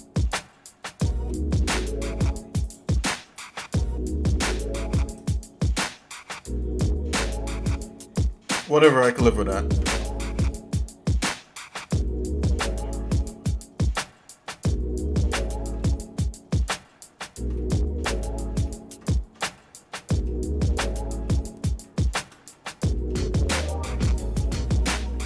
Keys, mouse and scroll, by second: 0.4 scroll up 1, 0.4 scroll down 1, 0.5 scroll up 1, 1.3 middle click, 2.6 click, 5.6 click, 9.6 Tab, 17.5 shift+middle click, 18.7 shift+middle click, 19.1 shift+middle click, 20.0 shift+middle click, 20.9 shift+middle click, 21.8 shift+middle click, 22.5 middle click, 23.6 shift+middle click, 24.1 middle click, 24.8 scroll down 1.